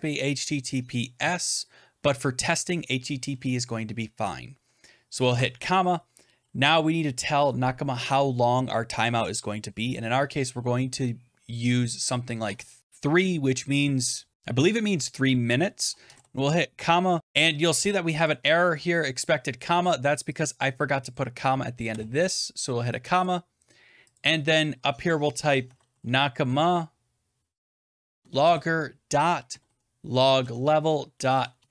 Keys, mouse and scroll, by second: 5.1 typing, 12.3 3, 15.9 typing, 17.2 click, 17.2 BackSpace, 18.1 click, 19.7 click, 20.4 click, 21.0 click, 21.8 ,, 23.1 click, 24.1 click, 25.3-28.0 typing, 28.1 Tab, 29.4-31.7 typing.